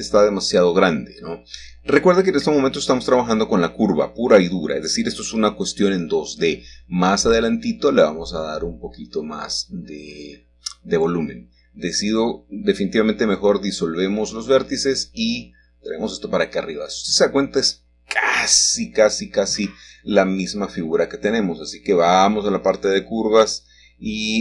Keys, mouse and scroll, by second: 0.8 click, 1.3-1.9 scroll up 1, 2.2 shift+middle click, 2.8 click, 4.0 g, 4.5 z, 6.8 click, 8.1 click, 8.6-9.7 right drag, 10.8 x, 13.2 click, 15.2 click, 17.2 g, 19.3 click, 21.8 Tab, 23.4 click.